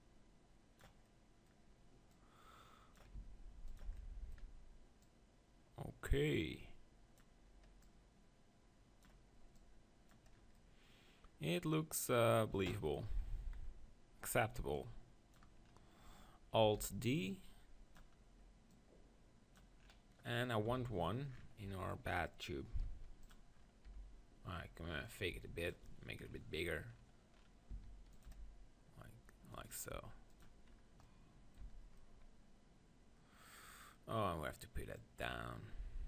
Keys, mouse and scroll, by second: 1.1-2.1 middle drag, 2.1-4.0 drag, 3.2 s, 5.0 click, 10.4 click, 10.6 middle click, 11.3-13.0 middle drag, 13.0 KP_3, 13.4 z, 14.7-16.6 drag, 16.8 alt+d, 17.0-18.0 drag, 17.3 right click, 18.6-20.6 drag, 20.6 middle click, 20.8 KP_7, 22.7 alt+d, 23.9 r, 25.1 click, 25.4 g, 27.6 middle click, 27.7 s, 28.2-31.4 drag, 28.2 g, 30.0 r, 31.4 middle click, 31.6 z, 35.0-36.0 drag.